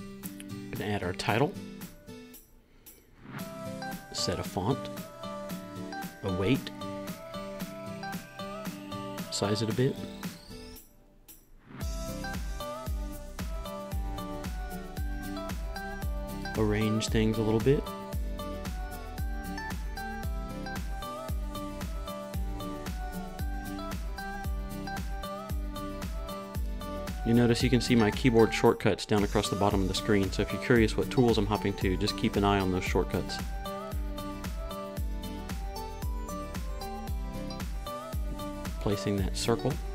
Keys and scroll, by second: 1.1-6.2 typing, 9.8 Down, 14.8 shift+Down, 16.6 Down, 17.2 Right, 17.3 Up, 17.4 Right, 19.0 o, 22.7 super+z, 23.6 r, 24.0 o, 36.0 Right, 37.0 Right, 37.3 Up, 38.1 Right.